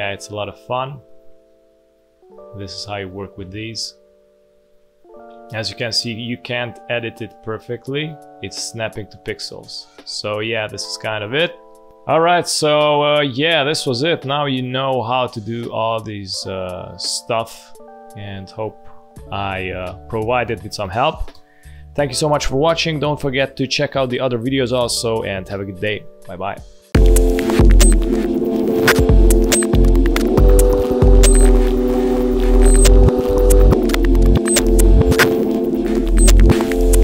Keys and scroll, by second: 2.3 space, 3.0 space, 4.1 space, 11.9 space, 12.9 space, 17.3 space, 18.7 z, 19.8 space, 20.8 v, 21.3 space, 26.8 F1.